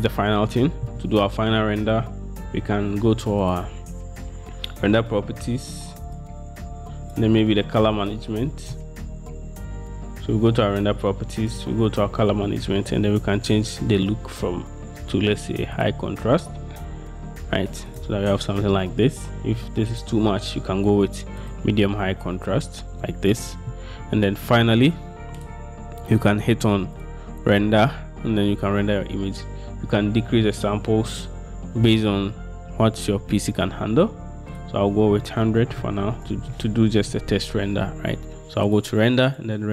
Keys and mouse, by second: 3.6 click, 11.7 click, 14.1-16.0 drag, 18.1-21.7 middle drag, 27.1-28.8 middle drag, 34.8-36.6 middle drag, 35.9 0, 38.9 middle click.